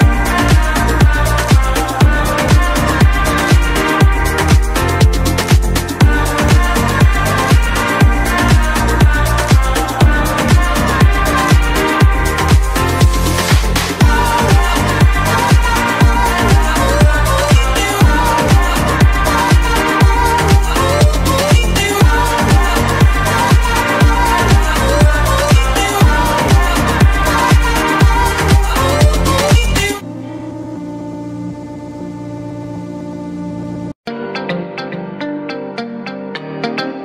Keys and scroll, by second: 24.4 Escape, 26.8 Escape.